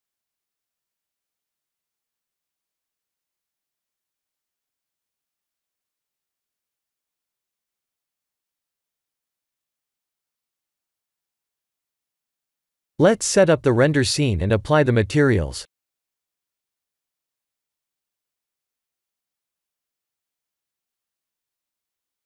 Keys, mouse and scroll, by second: 0.0 middle click, 4.1-4.7 scroll down 5, 4.6 middle click, 7.1 click, 7.7 click, 8.9 click, 9.3 click, 9.7 click, 10.1 ctrl+s, 10.9 click, 11.6 g, 13.5-14.0 scroll up 3, 14.0-15.8 shift+middle click, 15.0 middle click, 15.1 middle click, 15.5 shift+middle click, 15.6 middle click, 15.6 middle click, 17.0 click, 18.6 click, 19.9 click, 20.7 click.